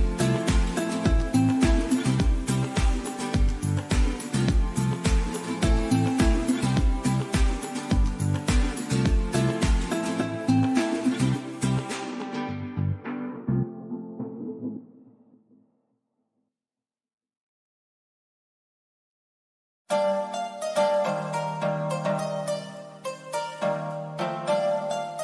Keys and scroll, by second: 3.2 super+d.